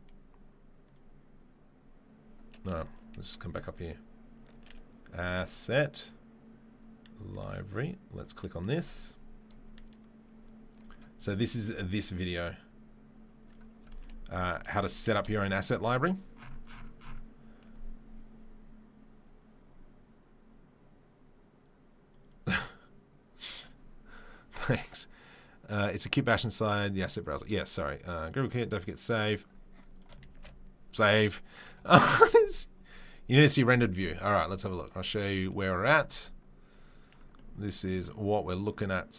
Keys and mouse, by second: 29.9 click, 30.0-39.1 ctrl+middle drag, 30.7 ctrl+s.